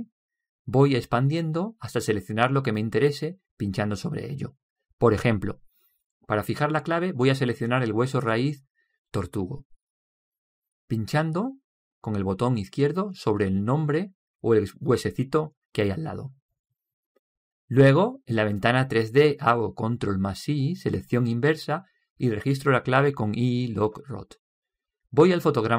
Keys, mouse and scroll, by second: 6.1-7.3 drag, 13.5-17.7 drag, 20.6 ctrl+i.